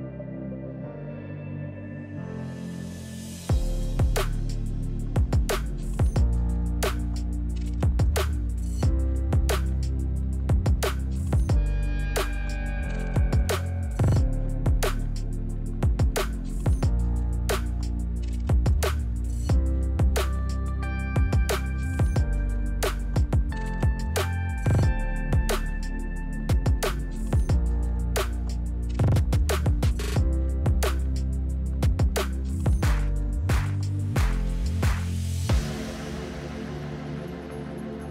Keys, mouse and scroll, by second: 1.1 click, 1.4 s, 3.4 click, 3.7 g, 4.7 click, 5.0-6.1 middle drag, 6.1 KP_1, 7.7 ctrl+KP_1, 8.3 click, 8.8 Delete, 10.3 ctrl+r, 11.3 click, 11.6 ctrl+r, 13.1 click, 13.2 middle click, 13.8 Tab, 14.0 click, 14.4-15.6 middle drag, 15.6 KP_1, 15.9 scroll down 1, 16.1-16.9 middle drag, 16.9 shift+a, 18.1 s, 19.4 click, 19.6-20.8 scroll down 1, 20.8 KP_1, 21.1 middle click, 21.6 click, 22.2 Tab, 22.5 click, 23.5 e, 24.6 click, 25.2 shift+b, 26.2 Escape, 29.5-30.1 scroll up 1, 30.1-31.7 right drag, 34.5 click, 35.2 Tab, 35.8-37.1 drag, 37.3 middle click, 37.8 click.